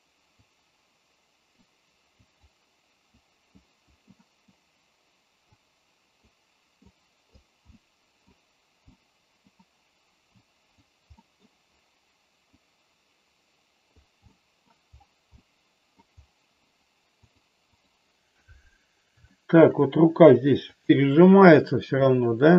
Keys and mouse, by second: 0.4-1.5 drag, 2.3 click, 3.1 click, 4.1 middle click, 5.5 click, 6.9 click, 7.6 middle click, 8.8 middle click, 10.4 click, 11.1 middle click, 12.5-13.8 drag, 14.3 middle click, 15.4 middle click, 17.1 click, 19.3 shift+middle click, 20.8 click, 22.0 middle click.